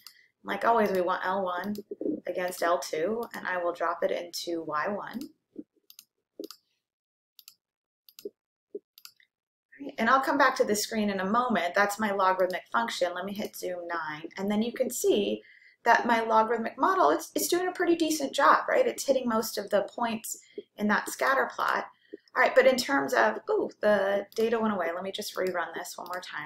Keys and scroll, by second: 1.1 1, 1.9 ,, 3.5 2, 5.4 ,, 6.5 Right, 7.4 Return, 8.2 Return, 9.0 Return, 13.4 9, 25.4 Return, 26.2 Return.